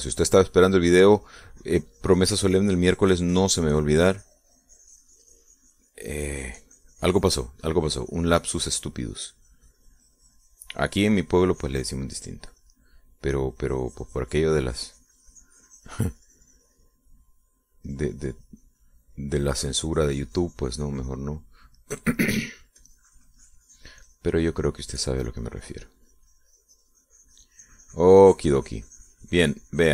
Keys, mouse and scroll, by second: 1.6 middle click, 2.4-14.0 drag, 14.0 middle click, 14.6-18.9 drag, 19.1-22.6 drag, 22.6-25.2 middle drag, 25.2-29.9 drag.